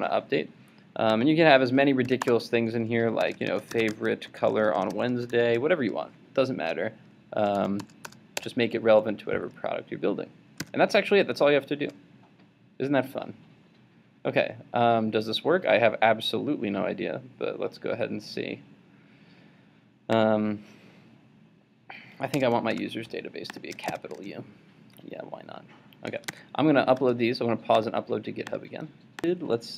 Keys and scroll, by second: 10.6 super+s, 23.9 super+s, 26.4 super+Tab.